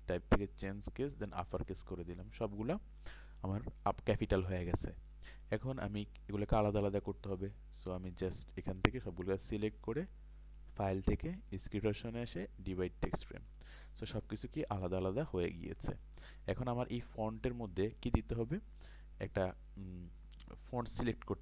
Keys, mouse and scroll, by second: 16.1 ctrl+space, 16.2 click.